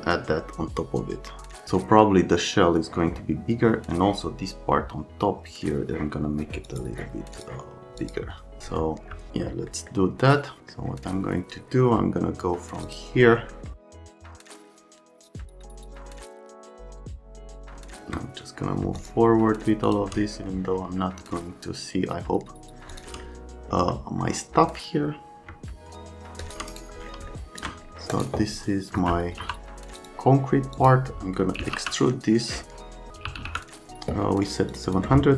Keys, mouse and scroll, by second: 6.7 click, 7.3 click, 8.0 click, 14.1 F3, 27.3 alt+middle click, 28.1 click, 29.0 F3, 29.4 F3, 29.9 Print, 30.7 Print, 31.3-33.9 typing.